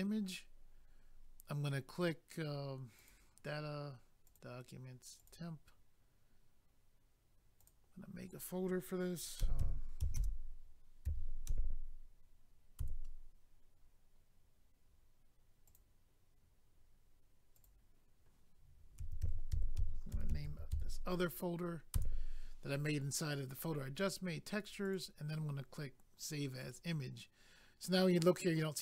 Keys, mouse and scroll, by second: 3.0 click, 3.1 click, 4.2 click, 4.3 click, 5.2 click, 5.3 click, 7.6 click, 7.7 click, 10.1-11.0 typing, 12.8 Return, 15.6 click, 15.7 click, 17.5 click, 17.6 click, 18.9 typing, 20.1 typing, 24.8 click, 24.9 click, 26.6 click, 26.7 click.